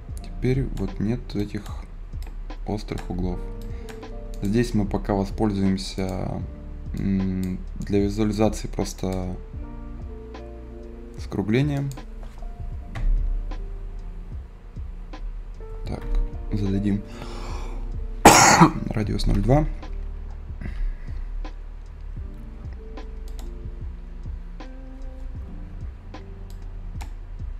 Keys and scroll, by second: 12.9 ., 15.4 i, 19.7 s, 20.6 b.